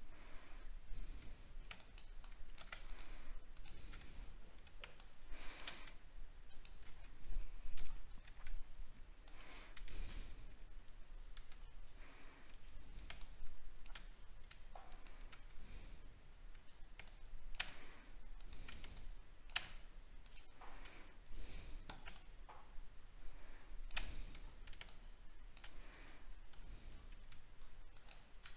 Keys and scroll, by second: 4.1-4.4 alt+scroll down 1, 7.9 alt+scroll up 1, 11.6 alt+scroll up 1, 12.2 alt+scroll down 1, 24.3 alt+scroll down 1, 26.5 alt+scroll up 1.